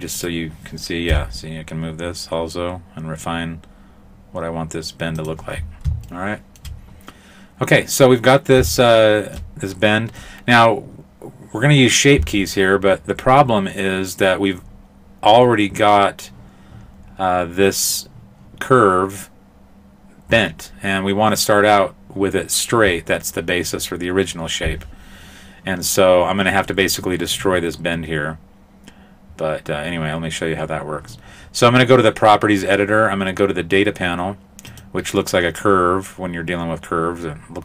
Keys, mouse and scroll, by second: 0.2 right click, 1.1 g, 5.5-6.1 scroll down 1, 6.1 shift+middle click, 6.1-6.5 scroll down 1, 8.8 shift+middle click, 8.9 shift+middle click, 34.7 click.